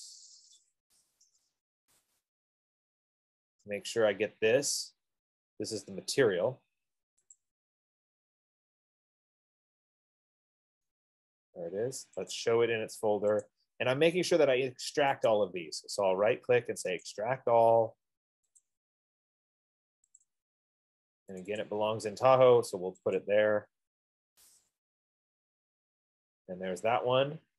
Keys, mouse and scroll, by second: 2.5 click, 5.3 click, 7.6 click, 12.5 click, 13.8 click, 15.5 right click, 17.4 click, 19.1 click, 20.5 click, 21.9 click, 22.1 click, 23.5 click, 24.9 click.